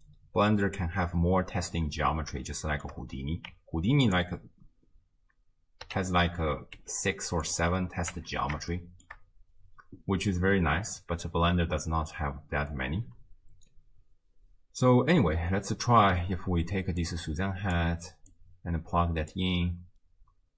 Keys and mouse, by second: 2.6 shift+middle click, 3.5 Tab, 4.0 click, 5.9 l, 6.8 g, 8.2 Tab, 8.7-9.2 shift+drag, 17.1 click, 18.3-19.5 drag.